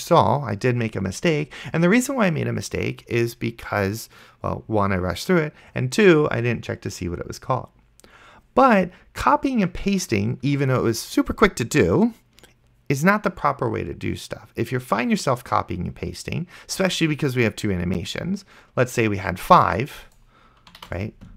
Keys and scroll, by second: 21.1 ctrl+c.